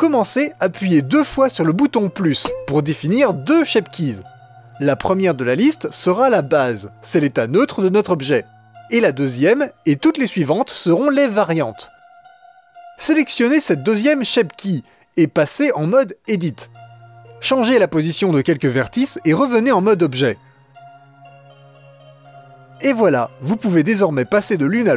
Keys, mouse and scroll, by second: 0.2 click, 3.0 click, 6.7 click, 10.7 click, 12.6 click, 14.6 click, 17.0-19.2 drag, 19.7 click, 20.2 g, 20.9 click, 21.1 g, 21.6 click, 21.8 g, 22.4-24.9 drag.